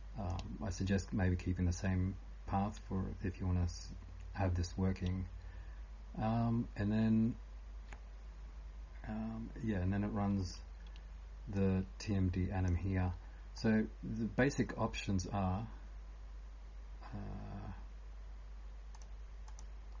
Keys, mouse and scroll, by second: 0.0-20.0 typing, 5.0 scroll down 1, 5.6 scroll down 1, 11.6 click, 13.6 click.